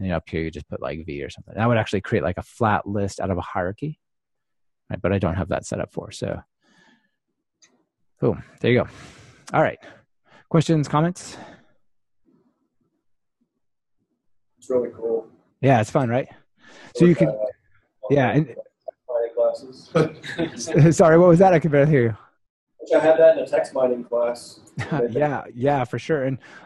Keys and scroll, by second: 0.4 ctrl+alt+shift+Right, 4.8 Escape, 5.1 super+z, 6.3 super+z.